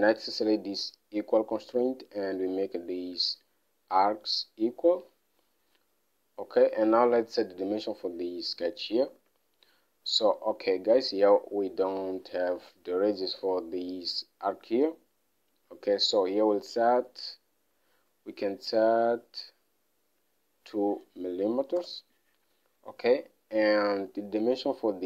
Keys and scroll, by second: 9.5 alt+Tab, 9.8 alt+Tab, 16.7 alt+Tab, 21.9 typing, 22.2 Return.